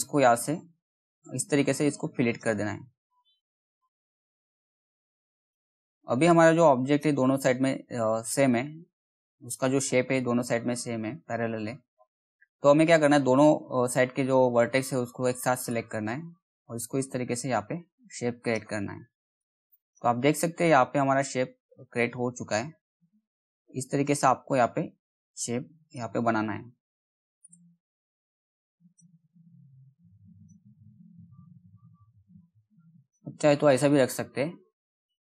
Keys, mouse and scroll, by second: 2.3-2.7 scroll up 1, 2.7 middle click, 4.4-8.3 drag, 8.3-8.8 scroll up 1, 8.8 middle click, 15.2-22.5 drag, 22.5-26.9 drag, 26.9 right click, 28.3 click, 30.7 ctrl+z, 32.5-35.3 drag.